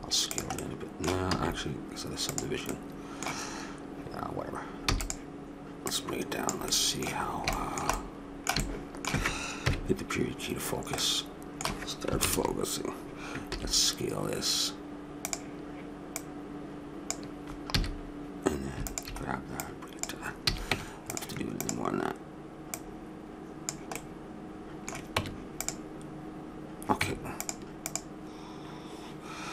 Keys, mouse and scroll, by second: 1.3 s, 2.5 middle click, 4.1 click, 4.8 e, 5.8 click, 6.7 middle click, 9.6 KP_Decimal, 12.2 ctrl+KP_Add, 13.5 s, 16.1-20.7 drag, 17.7 a, 20.4 a, 20.7 Tab, 23.9 click, 25.1 Tab, 27.0 Tab, 27.9-29.5 drag.